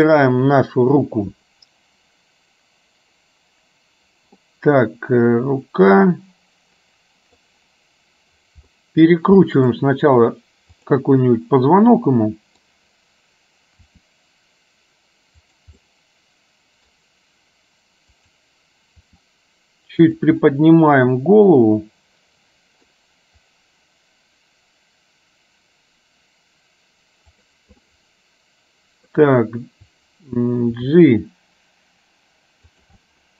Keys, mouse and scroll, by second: 0.1 click, 4.5-7.5 middle drag, 8.8 middle click, 9.6 middle click, 11.0 click, 11.3-12.7 middle drag, 13.8 r, 15.8-17.0 middle drag, 18.3 click, 19.1 r, 20.6-23.0 middle drag, 27.8-29.1 middle drag, 31.0 g, 33.1 middle click.